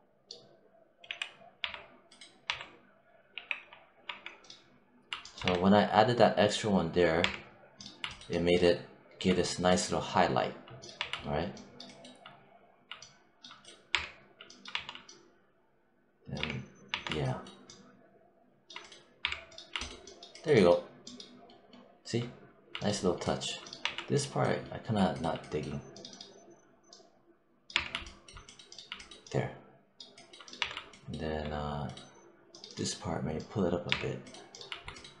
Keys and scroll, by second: 0.9 z, 3.2 w, 3.5 1, 5.3 1, 7.0 3, 10.8 1, 13.7 3, 14.5 1, 16.2 3, 16.7 1, 19.1 3, 23.6 1, 27.6 3, 30.4 1, 33.7 3.